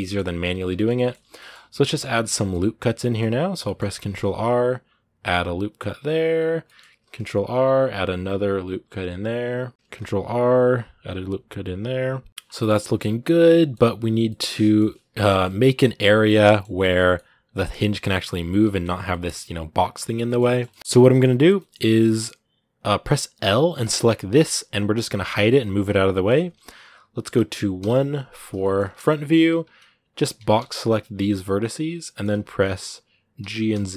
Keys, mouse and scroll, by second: 3.9 ctrl+r, 6.4 middle click, 6.8 ctrl+r, 12.3 scroll down 2, 12.4 middle click, 13.1 scroll up 2, 13.3 middle click, 14.2 scroll up 2, 14.4-16.6 middle drag, 16.6 scroll down 3, 16.8-18.4 middle drag, 18.4 Tab, 18.9 middle click, 19.6-20.8 scroll down 1, 20.8-21.4 scroll up 3, 20.9 shift+middle click, 21.4-22.5 middle drag, 22.5-23.6 right drag, 23.6 l, 24.1 scroll down 1, 24.2 middle click, 25.1 h, 25.4-27.6 middle drag, 27.6 KP_1, 28.4 shift+middle click, 28.6 scroll up 2, 29.5 z, 31.8 shift+middle click, 32.2-33.2 scroll down 2, 33.2 g.